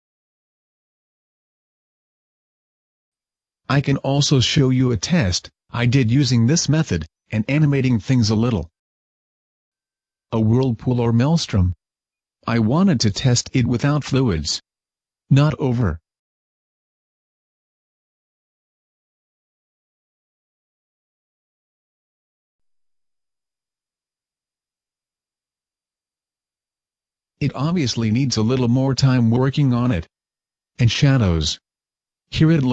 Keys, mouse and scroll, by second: 30.1 Escape, 30.7-31.2 scroll down 2, 31.2 Tab, 31.6 middle click, 32.2 scroll down 1, 32.6 shift+middle click.